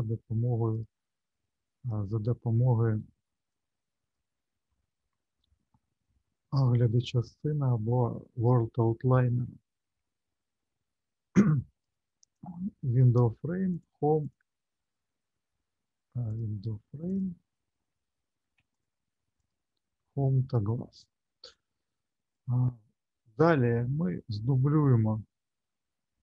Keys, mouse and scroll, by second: 0.7 click, 2.1 middle click, 3.5 click, 11.8 click, 13.7 shift+click, 14.2 shift+click, 16.3 click, 17.1 ctrl+click, 18.7 alt+click, 19.4 alt+click, 20.9 click, 21.5 click, 25.1 shift+middle click.